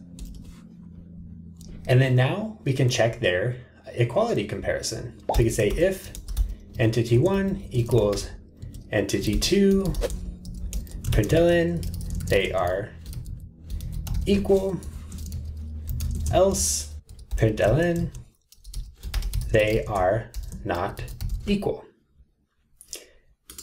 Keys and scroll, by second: 0.1 Escape, 6.8 Tab, 9.9 ctrl+shift+super+Return.